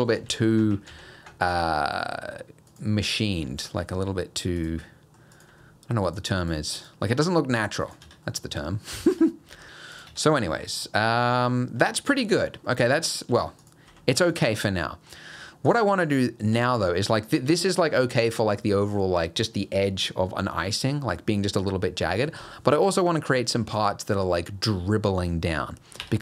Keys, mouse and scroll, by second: 0.0 middle click, 0.3 ctrl+z, 0.6 ctrl+z, 0.9 ctrl+z, 1.4 click, 2.1 g, 3.0 middle click, 3.6 click, 3.8 g, 4.9 middle click, 5.4 click, 5.5 g, 6.4 click, 6.8 click, 7.1 g, 8.1 Tab, 8.3 middle click, 8.8 middle click, 9.1 Tab, 9.5 g, 10.1 Tab, 10.3 middle click, 10.9 middle click, 12.0 scroll down 2, 12.2 middle click, 12.7 middle click, 13.0-13.3 scroll up 1, 13.3 Tab, 13.6 click, 13.9 g, 14.6 Tab, 14.8 middle click, 15.4 Tab, 15.7 click, 16.6 g, 17.5 Tab, 22.5 middle click, 23.4 middle click.